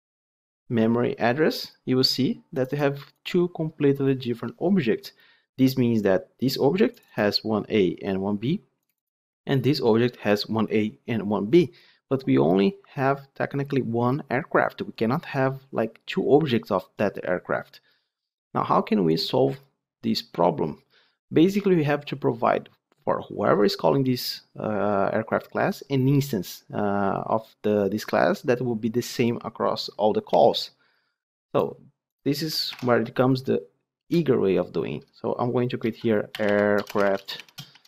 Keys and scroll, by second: 32.7 alt+Insert.